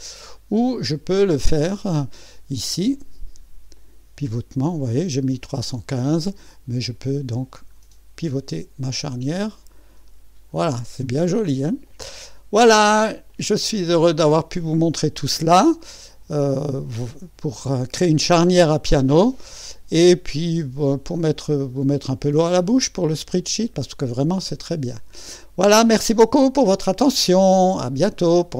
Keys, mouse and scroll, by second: 0.2 click, 2.9 click, 3.8 click, 7.8-9.8 scroll up 1, 9.8-10.7 scroll up 1, 10.7-11.9 scroll up 1, 11.9 click, 13.3 click, 15.2-16.0 scroll up 1, 16.0 click, 16.5-17.5 drag, 19.5-22.4 drag, 22.8-26.1 drag, 25.2 right click, 26.2-27.4 drag.